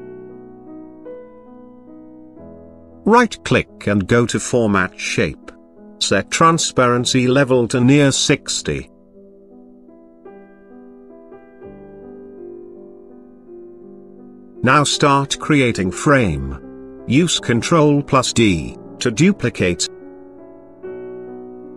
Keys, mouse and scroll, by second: 3.0 click, 3.5 right click, 3.8 double right click, 5.3 click, 6.8 click, 8.0 click, 10.7 click, 12.7 click, 14.6 click, 14.6 click, 15.0 click, 15.3 click, 15.4 click, 15.6 click, 16.0 click, 16.2 click, 16.6 click, 16.9 click, 17.1 click, 17.8 click, 17.9 click, 18.1 click, 18.2 click, 18.5 click, 18.8 click, 19.3 click, 19.4 click, 20.1 Up, 20.1 click, 20.3 Up, 20.4 click, 20.7 ctrl+d, 20.7 click, 20.9 click, 21.4 click, 21.5 click.